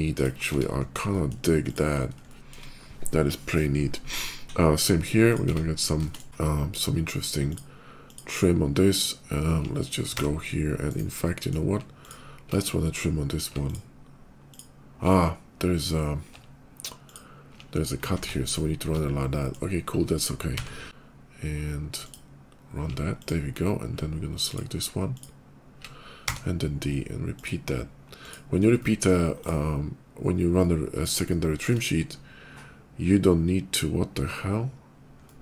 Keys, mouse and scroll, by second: 0.0 ctrl+click, 0.2 Tab, 0.6 middle click, 0.8 middle click, 1.0 middle click, 1.5 click, 1.8 middle click, 2.1 shift+middle click, 3.7 shift+middle click, 4.0 shift+middle click, 5.1 click, 5.9 middle click, 5.9 shift+Tab, 6.2 middle click, 7.3 alt+click, 7.9 alt+click, 10.0 d, 10.7 right click, 11.1 middle click, 11.7 alt+click, 13.5 alt+click, 14.4 alt+click, 15.0 alt+middle click, 17.9 ctrl+z, 18.3 click, 19.0 middle click, 20.4 d, 21.9 alt+click, 23.0 alt+click, 24.3 alt+click, 25.0 alt+click, 26.0 d, 27.2 click, 28.0 click, 28.3 middle click, 28.6 middle click, 29.2 click, 30.1 middle click, 30.3 middle click, 30.7 click, 31.1 shift+click, 31.6 shift+click, 33.0 shift+middle click, 34.7 middle click, 35.0 middle click.